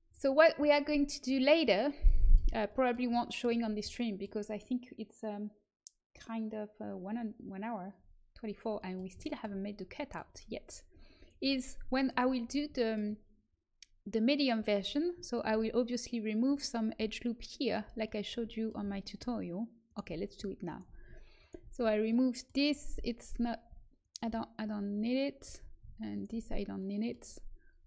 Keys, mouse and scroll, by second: 0.8-3.3 middle drag, 11.1 right click, 11.3 Tab, 15.5-18.6 middle drag, 18.8 middle click, 19.8-22.0 right drag, 22.0-25.4 middle drag, 25.4 ctrl+z, 25.4 right click, 25.6 middle click, 26.1 right click, 26.4-27.8 middle drag.